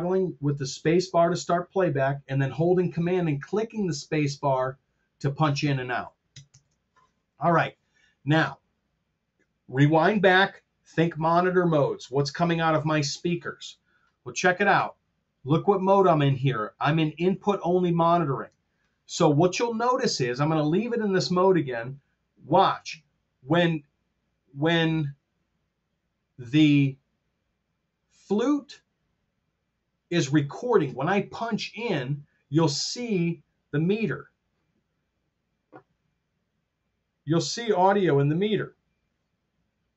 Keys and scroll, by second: 6.4 super+z.